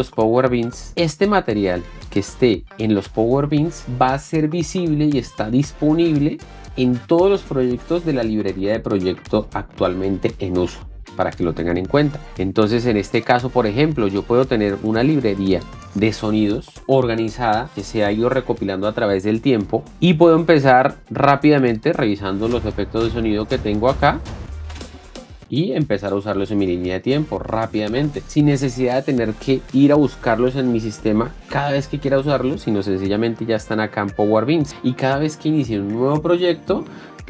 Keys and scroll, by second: 22.6 space.